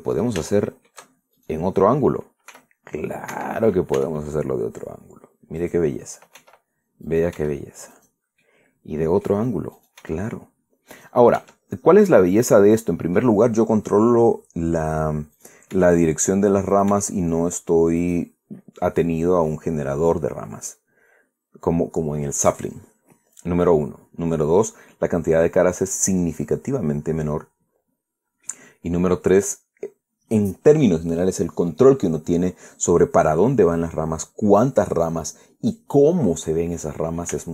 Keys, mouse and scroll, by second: 0.5 click, 1.2 shift+click, 2.1 shift+right click, 3.2 r, 4.0 Escape, 5.1 e, 6.3 click, 7.1 e, 7.8 click, 8.1 e, 8.6 click, 9.1-10.1 middle drag, 10.5 right click, 10.7 e, 10.8 middle click, 11.7 click, 12.1 e, 12.8 click, 13.2 middle click, 14.7-15.0 scroll up 2, 16.1 right click, 16.4 e, 17.4 click, 17.6 e, 18.7 click, 19.1-20.2 scroll down 3, 20.2-21.6 middle drag, 21.9-22.2 scroll up 2, 23.5-23.8 scroll down 2, 24.4-24.7 scroll up 2, 24.8 scroll down 2, 25.3-29.4 middle drag, 33.2-33.5 scroll down 2, 33.7-37.5 middle drag.